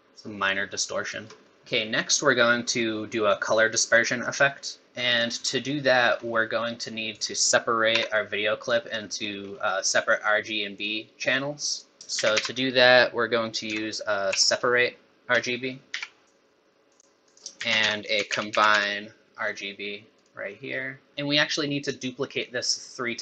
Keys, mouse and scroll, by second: 1.5 middle click, 1.6 middle click, 2.0 scroll down 3, 2.2-3.1 scroll up 2, 3.2-3.6 scroll down 1, 3.6 scroll up 1, 4.8 middle click, 5.4 scroll up 4, 5.8 middle click, 6.2-6.8 scroll up 2, 6.8 click, 7.9 g, 9.0 middle click, 9.6 scroll up 2, 10.8 click, 12.0 click, 12.0 middle click, 12.0 x, 12.2 shift+a, 17.2 click, 17.5 shift+a, 21.1 click, 21.1 middle click, 21.1 scroll up 3.